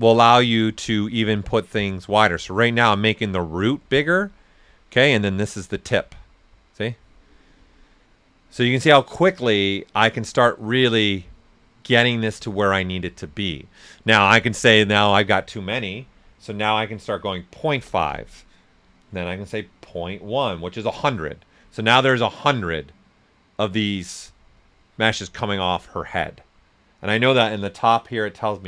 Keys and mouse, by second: 7.1 right click, 11.6-12.4 typing, 14.7 click, 14.7 typing, 16.5 ., 17.7 Return, 19.7-20.8 typing, 20.9 Return.